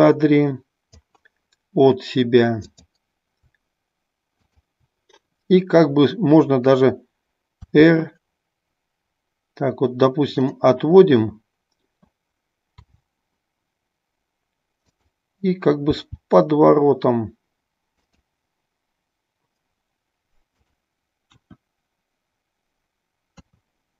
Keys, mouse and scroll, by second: 0.0-1.3 drag, 4.4-5.2 drag, 12.6 r, 18.1 click.